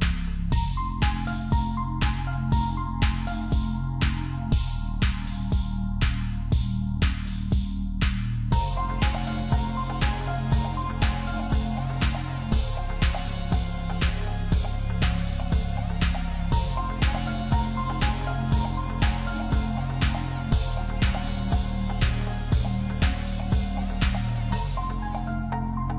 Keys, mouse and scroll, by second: 0.4 Tab, 0.6-1.0 scroll down 5, 1.0 click, 1.5-1.9 scroll down 1, 1.9-3.4 middle drag, 3.4-4.1 scroll up 2, 4.1 KP_1, 5.0 shift+middle click, 8.4-9.2 scroll up 1, 9.2-10.6 middle drag, 10.6 KP_1, 12.7 shift+a, 16.4 Tab, 19.0 g, 24.6-25.2 scroll up 2, 25.2-25.9 shift+middle drag.